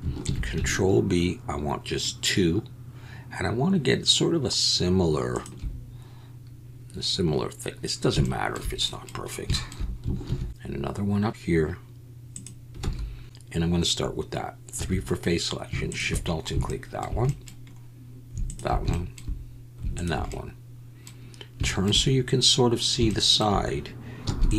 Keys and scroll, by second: 0.2 ctrl+b, 10.2 ctrl+r, 12.8 alt+a, 14.7 3, 24.3 e.